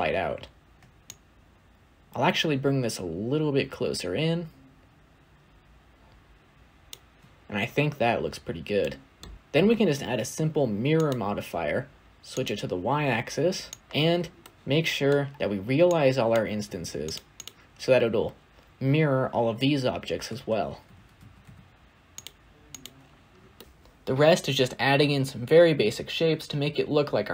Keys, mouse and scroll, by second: 0.9-4.0 shift+drag, 8.1-8.7 scroll down 1, 8.7-9.2 middle drag, 9.2 scroll down 3, 9.3 scroll up 2, 10.9 click, 12.2-22.1 drag, 22.1 shift+a, 23.2-24.2 scroll down 2, 23.5 middle click, 24.2 scroll down 1, 24.3-24.8 scroll up 8, 24.6 click, 24.7 middle click, 24.8-25.7 typing, 24.9 scroll down 1, 25.1 scroll up 2, 25.3 shift+middle click, 25.4 scroll down 2, 25.5 scroll up 1, 25.9 middle click, 26.1 scroll up 3, 26.2 shift+middle click, 26.7 shift+click, 27.1 shift+click.